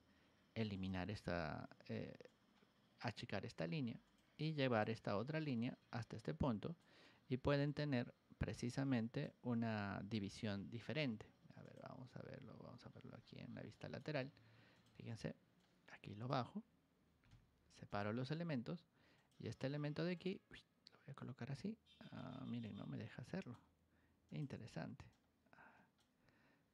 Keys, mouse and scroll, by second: 0.7 click, 2.2 click, 4.0 click, 4.6 click, 5.3-6.7 drag, 8.4 click, 10.1 scroll down 1, 10.2 middle click, 11.6 click, 12.8-13.6 scroll down 5, 13.7 middle click, 14.7 click, 15.5 click, 17.8 click, 19.1 click, 20.1-21.1 drag, 22.6 click, 24.2 click, 25.0 click.